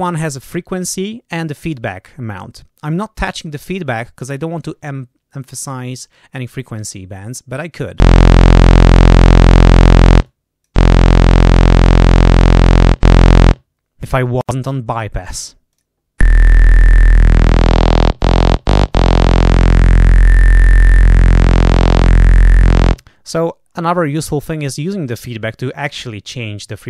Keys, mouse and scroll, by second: 8.7-10.1 drag, 10.2 click, 11.0-12.2 drag, 12.2 click, 15.6 click, 17.0-23.0 drag.